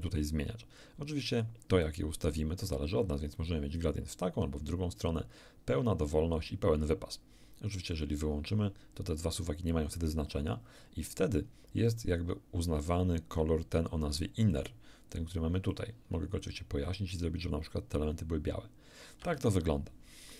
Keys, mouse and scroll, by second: 0.0-1.6 drag, 1.8-3.9 drag, 4.2-7.1 drag, 7.9 click, 14.5 click, 15.7-19.7 drag, 19.2 Escape.